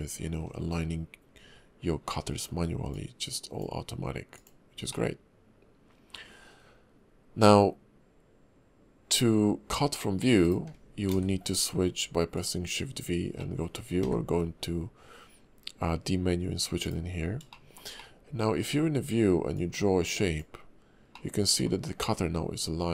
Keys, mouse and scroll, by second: 2.1 middle click, 2.9 click, 4.9 middle click, 9.7 d, 11.1 shift+v, 13.4 middle click, 14.0 d, 17.5 shift+middle click, 19.5 click, 21.1 middle click.